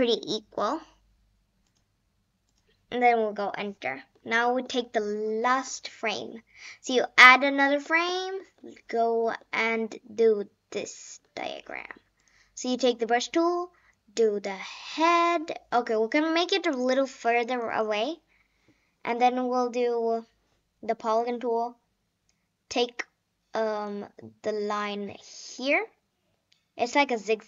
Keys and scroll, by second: 3.4 Return, 4.0 Return.